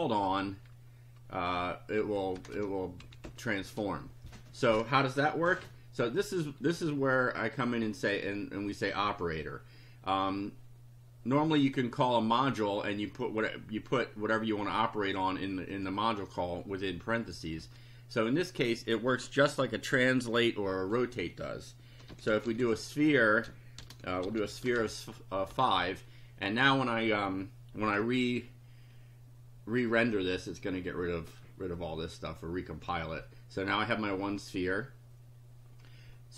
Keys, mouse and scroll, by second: 2.0 Home, 2.4 Return, 3.0 Up, 14.0-15.3 drag, 15.7 click, 17.6 Up, 21.8-25.3 typing, 25.5 Home, 32.7 F5.